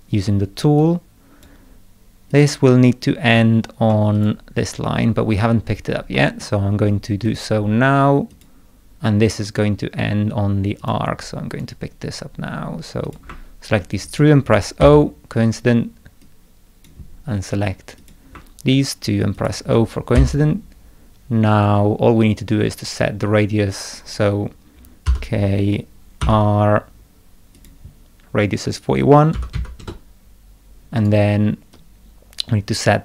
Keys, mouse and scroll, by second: 0.8-1.4 drag, 2.3 click, 4.1 click, 5.6 scroll down 2, 6.1 middle click, 7.2 click, 8.3 click, 10.8 click, 11.6 right click, 13.0 click, 14.0 ctrl+click, 14.8 o, 16.2-16.8 drag, 18.0 click, 19.3 ctrl+click, 20.1 o, 25.0 k, 26.2 r, 27.5 click, 30.9 right click, 31.7-33.0 drag.